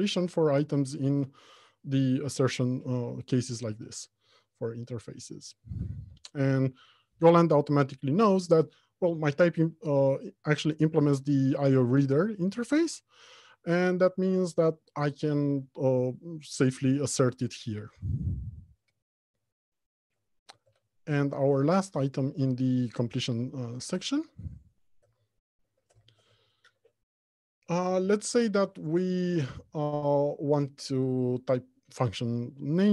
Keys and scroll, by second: 3.9 Return, 23.2 alt+Home, 23.7 Left, 24.2 Return.